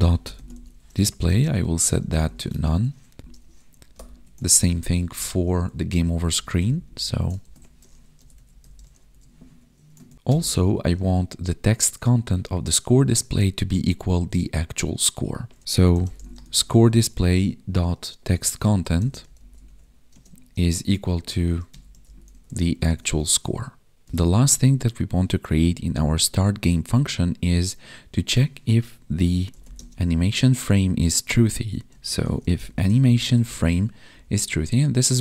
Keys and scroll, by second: 1.0 space, 1.2 space, 2.6 ctrl+s, 3.8 alt+shift+Down, 4.4 ctrl+Left, 5.6 Left, 6.6 ctrl+Left, 7.3 ctrl+shift+Right, 9.4 Tab, 10.0 ctrl+s, 15.6 ctrl+s, 16.7 Tab, 19.6 Tab, 20.0 space, 20.5 space, 23.0 ctrl+s, 29.7 space, 33.3 Tab, 34.1 Right.